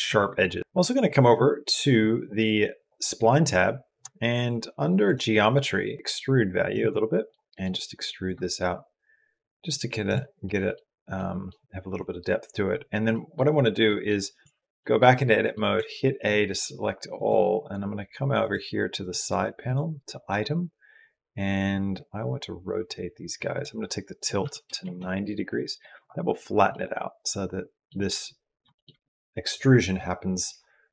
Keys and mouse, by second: 0.6 Tab, 2.6 click, 4.9 click, 6.0 click, 6.7 middle click, 8.0-9.2 drag, 10.2 middle click, 11.0 middle click, 12.9 middle click, 13.7 middle click, 14.2 Tab, 14.6 middle click, 15.1 middle click, 15.6 a, 16.9 click, 18.8 click, 23.5-24.8 drag, 26.5 click, 26.8 middle click, 26.9 click, 27.1 middle click, 28.5 shift+middle click, 30.8 middle click.